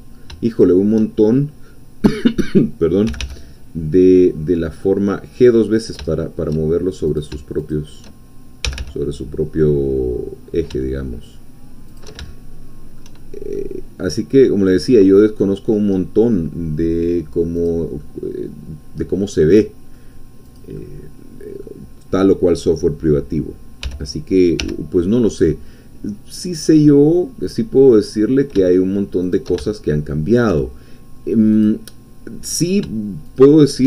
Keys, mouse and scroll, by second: 0.5 shift+click, 3.1 g, 5.8 shift+click, 6.2 shift+middle click, 7.2 shift+click, 8.6 g, 11.9 shift+click, 12.3-15.9 shift+middle drag, 16.0-16.6 scroll down 1, 17.6 click, 18.0-20.4 middle drag, 20.4 click, 20.8-23.8 middle drag, 23.8 g, 24.6 y, 29.2 shift+click, 29.7 shift+middle click, 31.5 click, 33.4 shift+click.